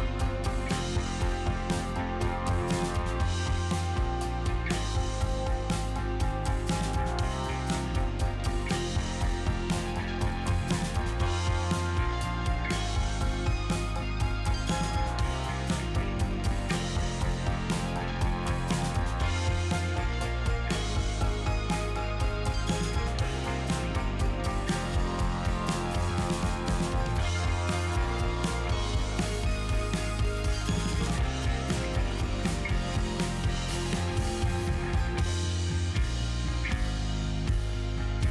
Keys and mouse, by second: 0.5-1.9 middle drag, 2.7 middle click, 4.5 click, 6.3-7.1 shift+f, 7.7 f, 7.9 f, 8.0 f, 9.2 middle click, 9.8 shift+click, 10.4 shift+click, 11.0 middle click, 11.7 KP_Divide, 12.9 middle click, 14.1 Tab, 14.5 click, 14.8 Tab, 17.3 KP_Divide, 18.1-18.6 middle drag, 19.1 Tab, 19.5 Tab, 22.5 middle click, 23.2 ctrl+s, 24.2 KP_Divide, 24.7 middle drag, 25.3 click, 25.9 shift+middle drag, 26.3 middle drag, 26.7 z, 29.1-30.9 middle drag, 31.9 KP_Divide, 32.4 click, 33.3 KP_Divide, 34.1-35.1 middle drag, 35.1-36.7 drag, 36.9-37.4 middle drag, 37.6 click, 38.0 click.